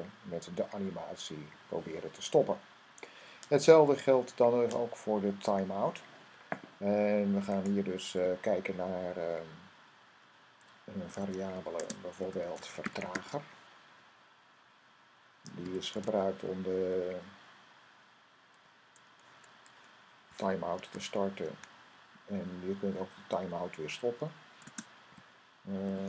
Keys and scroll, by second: 10.8-13.5 typing, 15.1-16.3 typing, 18.5 ,, 23.5-23.9 typing, 25.0-26.0 typing.